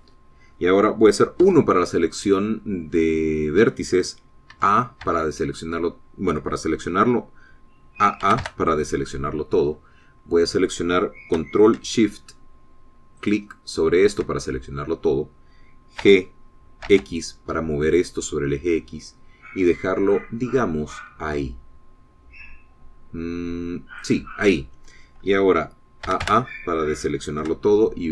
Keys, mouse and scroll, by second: 0.4 click, 2.4 1, 5.6 a, 9.2 a, 14.2 alt+shift+click, 17.0 g, 17.9 x, 25.0 click, 27.2 a.